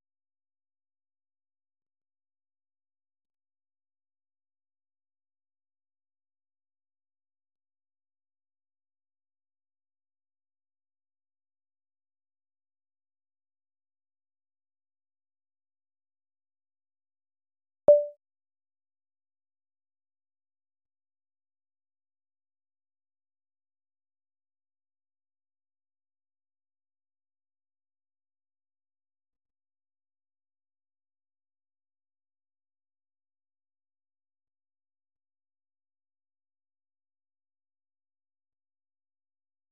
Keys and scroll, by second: 8.8 ctrl+c, 11.6 super+1, 14.7 ctrl+alt+%, 15.4-18.2 typing, 18.3 Return, 23.7-27.8 typing, 28.8-29.6 typing, 31.6 Return, 33.3 ctrl+x, 33.6-39.7 typing.